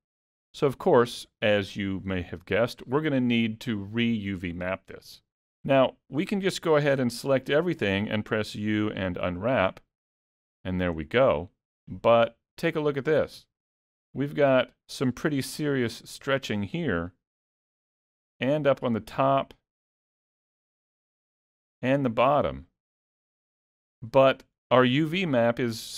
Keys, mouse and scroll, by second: 5.7 middle click, 7.0 a, 8.6 u, 11.3 middle click, 14.9-17.1 scroll up 1, 17.1 middle click, 19.1 middle click, 20.3 middle click.